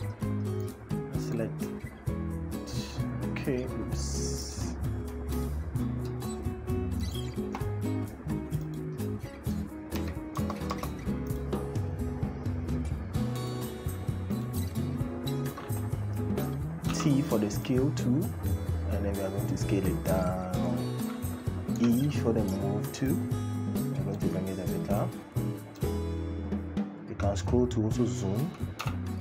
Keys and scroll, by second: 9.7 Right, 10.2 BackSpace, 21.6 e, 28.6 t.